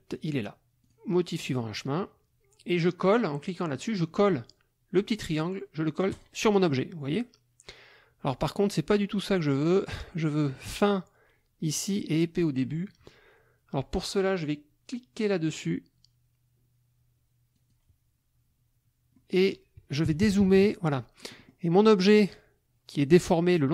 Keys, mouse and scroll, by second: 0.9 click, 6.1 click, 15.5 click, 17.6 click, 19.1 middle click, 20.1 KP_Subtract, 21.2 middle click, 21.8 middle click.